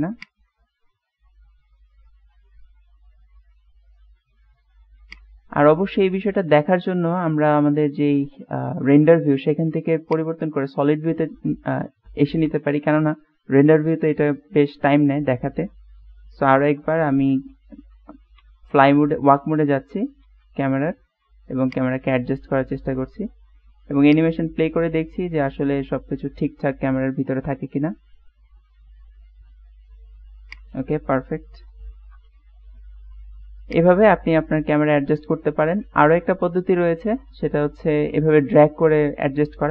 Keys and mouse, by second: 0.4 click, 5.2 click, 10.2 click, 16.7 shift+`, 30.6 click, 32.0 shift+`, 35.9 middle click, 36.5-38.2 middle drag.